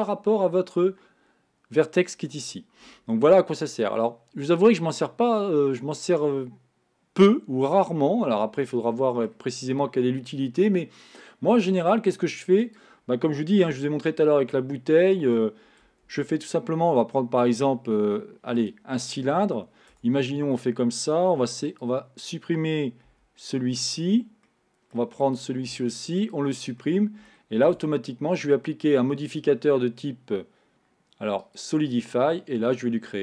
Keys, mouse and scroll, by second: 5.5-8.4 middle drag, 12.8 click, 13.8 x, 14.9-16.1 middle drag, 16.1 shift+a, 20.4 Tab, 21.5 3, 21.7 click, 23.2 x, 24.5 middle click, 25.3 click, 25.7 x, 26.9 middle click, 27.7 Tab, 29.3-32.3 drag, 32.8-33.2 drag.